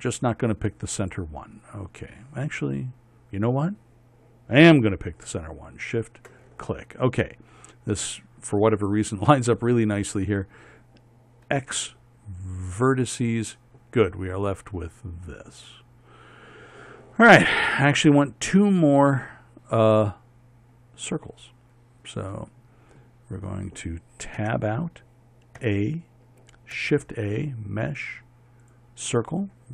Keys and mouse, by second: 6.5-12.1 drag, 12.1 x, 25.0 Tab, 26.2 a, 27.4 shift+a.